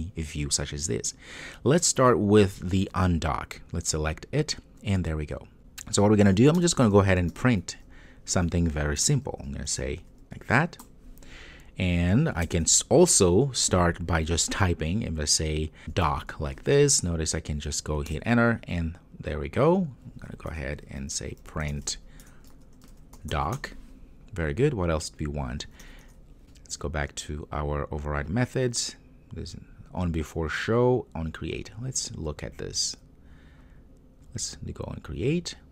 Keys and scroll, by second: 9.1 Return, 18.2 Return, 26.4 super+n, 28.1 ctrl+o.